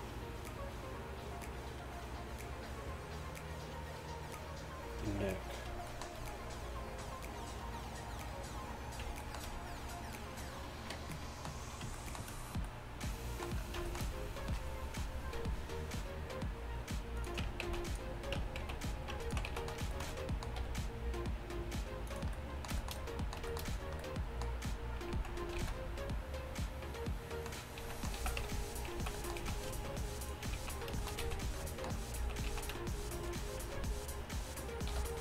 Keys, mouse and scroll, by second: 17.4-20.4 right drag, 18.4 Tab, 18.7 z, 19.5 z, 20.6 g, 25.2 z, 25.6 z, 27.8 z, 28.2 z, 28.5 Tab, 29.0 z, 30.0-32.5 typing, 35.0 h.